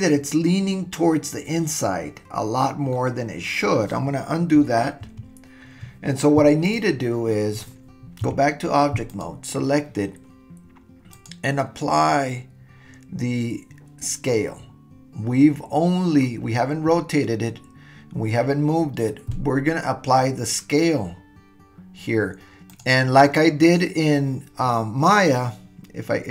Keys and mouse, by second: 2.9-3.7 middle drag, 5.0 super+z, 6.6 drag, 8.2 Tab, 9.1 click, 11.1-22.8 drag.